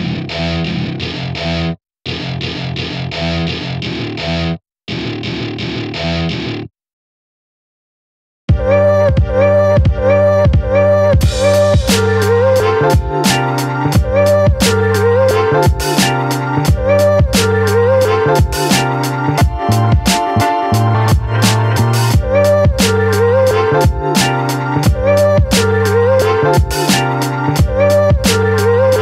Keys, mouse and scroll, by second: 0.1-1.5 drag, 1.5 scroll down 1, 1.7-2.2 scroll up 1, 2.2 shift+middle click, 2.8 KP_Decimal, 3.1 middle click, 3.9 Tab, 4.3 Tab, 6.6 click, 6.9 scroll down 2, 6.9 middle click, 7.4 KP_1, 7.5 scroll up 1, 7.7 shift+middle click, 8.0 s, 10.4 click, 10.6 scroll down 2, 10.7 middle click, 11.1 scroll up 2, 11.3 middle click, 12.0-12.6 scroll down 2, 12.6-13.1 scroll down 5, 13.1 middle click, 13.4-14.3 scroll up 2, 15.2 click, 15.4 scroll down 3, 15.5 middle click, 16.5-17.6 drag, 17.6 ctrl+z, 18.1-19.5 drag, 20.2-21.8 middle drag, 21.8 scroll up 2, 22.0-22.3 scroll down 2, 22.3 KP_3, 22.7 scroll up 1, 22.9 scroll down 1, 22.9 shift+middle click, 23.7 r, 24.4 middle click, 25.2 KP_3, 25.6 r, 26.2 scroll up 1, 26.4 shift+middle click, 28.2 Tab, 28.4 shift+middle click, 28.7 Tab.